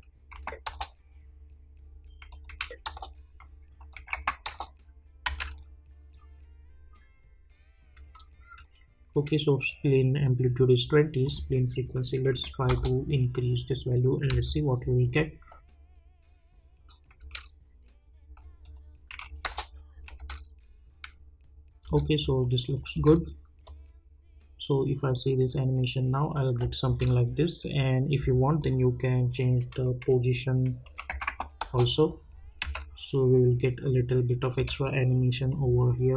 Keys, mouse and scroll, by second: 0.6 Return, 2.3 click, 2.8 Return, 3.8 click, 4.4 Return, 5.2 space, 7.9 space, 11.2 click, 12.7 Return, 14.3 space, 17.2 space, 18.6 click, 19.4 Return, 20.2 space, 22.4 click, 22.9 space, 26.8 space, 28.6 click, 31.6 Return, 32.6 space, 34.5 space, 35.5 click.